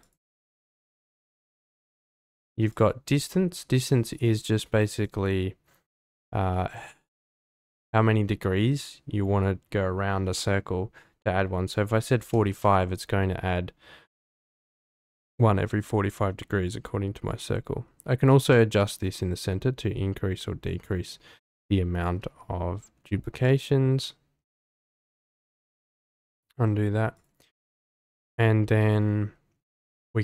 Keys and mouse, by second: 0.0 click, 3.2-5.4 drag, 7.4-13.0 drag, 17.4-21.4 drag, 23.4-25.0 ctrl+drag, 25.9 ctrl+z.